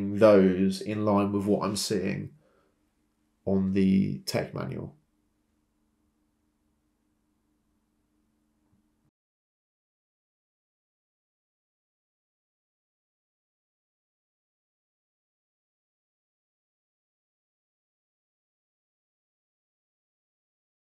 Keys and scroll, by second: 14.5 typing, 15.0 Return, 19.2 Escape.